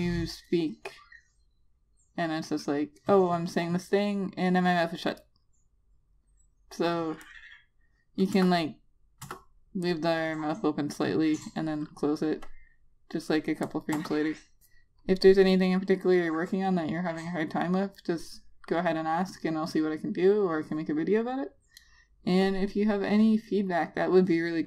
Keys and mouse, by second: 8.1 click, 9.3 Return, 10.1 Return, 10.8 click, 14.8 Return.